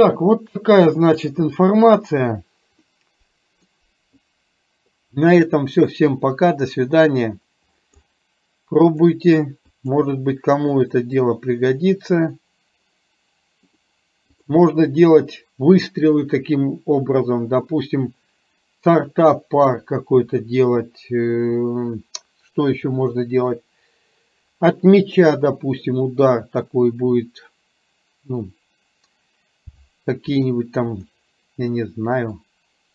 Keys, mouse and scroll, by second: 1.1 click, 2.9-3.8 middle drag, 9.8 click, 14.4 click, 32.4-32.9 drag.